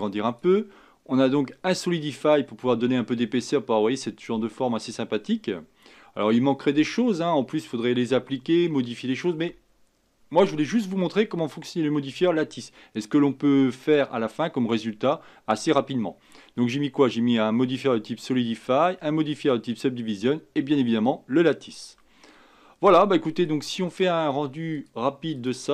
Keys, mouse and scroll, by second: 1.4 scroll down 2, 2.7-16.4 scroll down 1, 16.4-18.4 scroll down 1, 18.4-18.7 scroll down 1, 21.2-21.9 scroll down 1, 21.9-23.0 scroll down 6, 23.0-24.8 middle drag, 24.8 click.